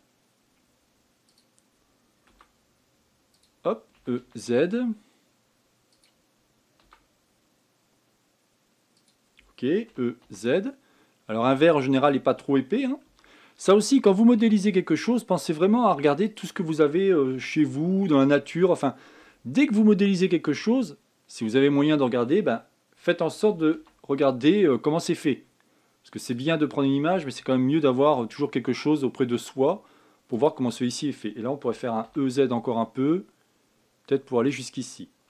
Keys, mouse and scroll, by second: 3.1 s, 10.7 e, 13.8 s, 18.2-21.3 shift+middle drag, 24.3 e, 28.2 s, 32.4 e.